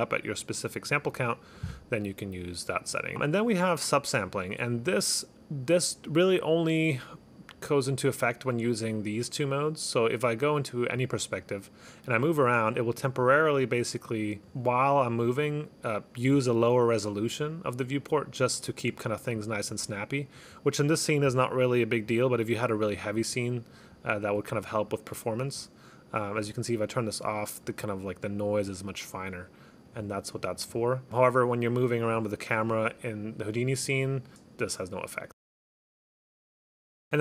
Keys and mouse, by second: 3.0 click, 4.9 click, 11.1 click, 12.0 click, 13.7 click, 14.8 click, 17.4 click, 18.6 click, 19.2 click, 19.7 click, 20.5 click, 21.8 click, 23.0 click, 23.4 click, 24.1 click, 24.6 click, 25.0 click, 26.4 click, 26.9 click, 27.7 click, 28.5 click, 29.1 click, 30.0 click, 31.1 click.